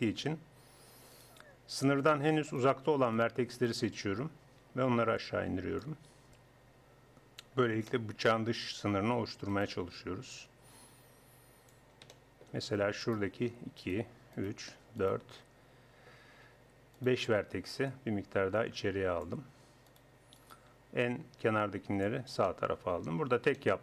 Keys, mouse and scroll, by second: 1.1-3.8 middle drag, 3.8-5.5 right drag, 5.2-9.0 drag, 7.9-9.0 middle drag, 9.0 a, 13.0 click, 13.9-16.9 right drag, 17.0-18.8 right drag, 17.9-19.9 drag, 19.9 right click, 21.0-22.1 drag, 21.0-22.1 right drag.